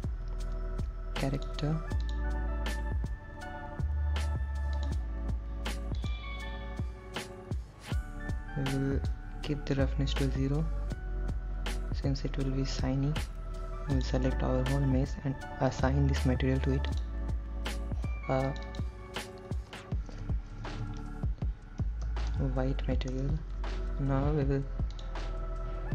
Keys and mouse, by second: 2.3 click, 5.0-6.4 drag, 9.3 click, 14.2 click, 14.4 a, 16.0 click, 18.7 click, 20.7-24.1 shift+drag, 25.2 click.